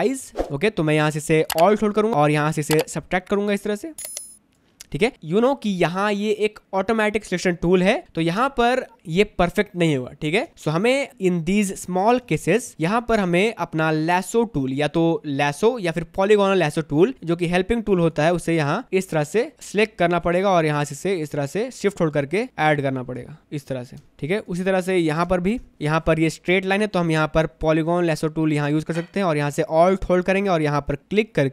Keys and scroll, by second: 6.3 space, 10.5 space, 12.4 space, 24.1 space.